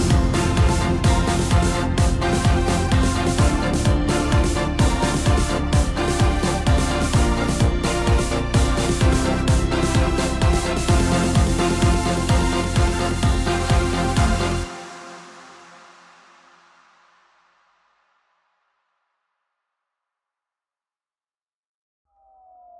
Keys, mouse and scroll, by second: 2.6 scroll down 3, 3.7-5.1 middle drag, 5.1 scroll up 2, 6.9 Tab, 8.2-8.7 scroll up 2, 8.7-9.3 scroll down 3, 9.3-11.0 middle drag, 11.0-11.4 scroll up 2, 12.3 click, 13.1 click, 14.1-15.1 scroll up 1, 15.1 Tab, 16.2 scroll down 2, 16.8 middle click, 17.6-19.1 scroll up 1, 19.1 p, 21.6 Tab, 22.4 click.